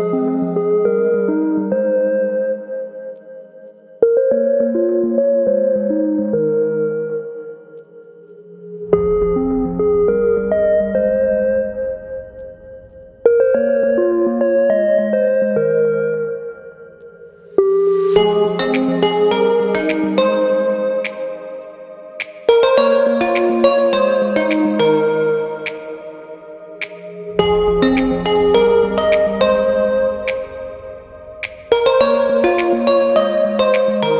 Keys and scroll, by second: 0.0 typing, 11.3 typing, 12.6 Return, 13.1 typing, 21.4 typing, 23.7-24.9 typing, 30.8-31.2 typing.